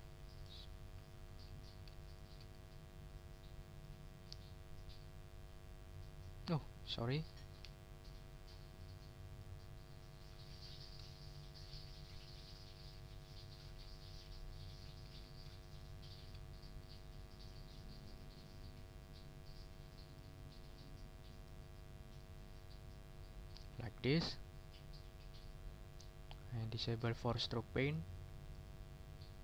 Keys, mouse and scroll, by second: 0.1 ctrl+click, 0.4 ctrl+click, 1.3 ctrl+z, 1.6 ctrl+scroll up 2, 2.0 ctrl+shift+click, 3.7 click, 4.4 ctrl+scroll down 2, 7.6 d, 8.1 click, 9.3 click, 10.2 ctrl+click, 10.6-11.2 ctrl+scroll up 3, 11.2 ctrl+shift+click, 11.7 ctrl+shift+click, 12.8 click, 13.3 click, 14.1 click, 15.1 ctrl+z, 15.7 ctrl+shift+click, 16.8 shift+click, 18.0 click, 18.7 click, 20.0 click, 20.6-20.9 ctrl+scroll down 2, 21.4 ctrl+click, 21.7 ctrl+click, 23.2 ctrl+scroll down 2, 23.7 ctrl+click, 24.1 ctrl+click, 25.9 click, 26.9 click, 27.8 click, 28.5 click, 29.1 ctrl+scroll up 1.